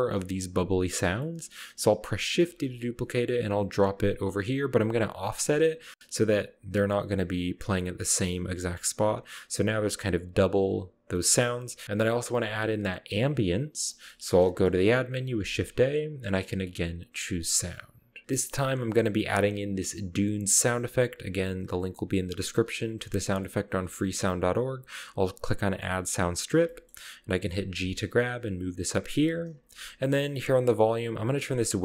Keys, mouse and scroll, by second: 0.0-1.0 scroll up 1, 1.2 middle click, 2.5 shift+d, 4.7 click, 5.6 g, 7.7 scroll up 1, 9.4 click, 10.6 click, 10.7 middle drag, 11.1-11.4 middle drag, 11.8 space, 13.9-14.8 middle drag, 15.3 shift+a, 25.6 click, 26.2 scroll down 1, 26.6-27.0 ctrl+middle drag, 27.7 g, 29.2 click, 29.6 ctrl+middle click, 31.3 click.